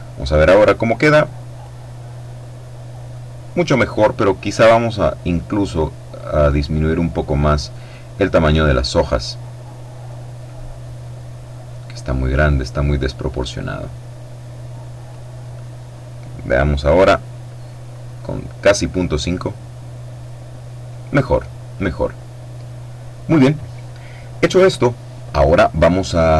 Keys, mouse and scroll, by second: 1.2 click, 4.5-5.5 scroll down 1, 6.8-7.3 scroll up 1, 7.3-8.0 scroll down 1, 8.1-9.0 scroll down 1, 9.0-10.2 scroll down 1, 10.2-15.3 drag, 17.6-18.9 scroll up 2, 21.0-21.4 scroll up 1.